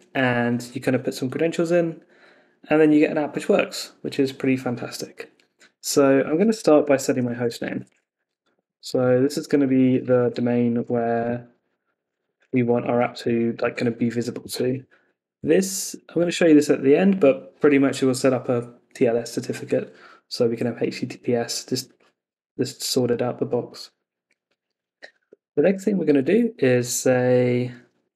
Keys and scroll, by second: 6.2 Escape, 9.2 Left, 13.2 Escape, 13.6 super+s, 25.2 Escape.